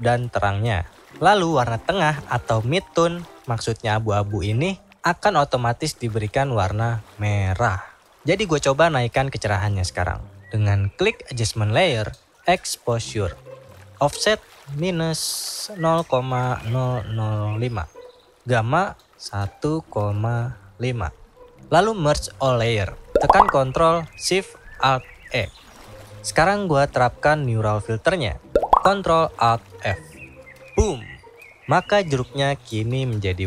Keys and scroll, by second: 28.7 ctrl+alt+f.